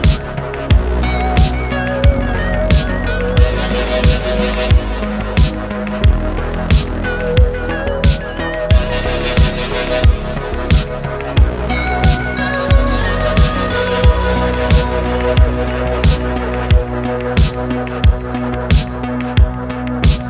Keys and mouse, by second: 1.0 click, 1.3 middle drag, 2.5 click, 3.3 middle click, 4.0 middle click, 4.9 r, 6.6 click, 6.8-7.6 middle drag, 7.8 middle click, 8.2 r, 9.5 click, 10.5-11.4 middle drag, 11.6 middle click, 12.9 click, 13.7 middle click, 14.5 click, 14.8-15.3 middle drag, 16.5 click, 16.9 middle click, 17.5 middle click, 18.1 g.